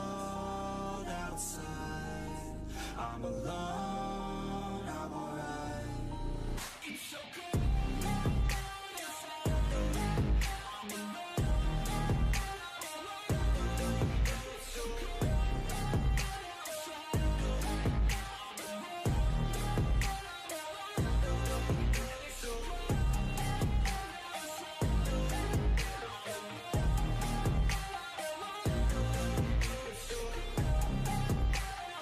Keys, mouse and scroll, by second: 1.9 g, 3.1 s, 4.5 e, 6.5 s, 7.4 g, 8.6 s, 9.5 g, 10.8 shift+middle click, 11.2 e, 11.8 s, 13.4 g, 14.9 e, 15.4 s, 16.0 g, 17.2 scroll down 3, 18.0 click, 18.2-18.6 middle drag, 18.6 ctrl+l, 19.0 s, 21.5 middle click, 22.3 ctrl+r, 22.7 Escape, 23.8 ctrl+r, 24.4-24.8 middle drag, 24.8 KP_7, 25.3 scroll up 1, 25.5 shift+middle click, 26.4 click, 26.7 1, 26.9-27.3 drag, 27.3 g, 29.1 shift+drag, 29.6 s, 30.6 shift+middle click, 31.3 shift+click.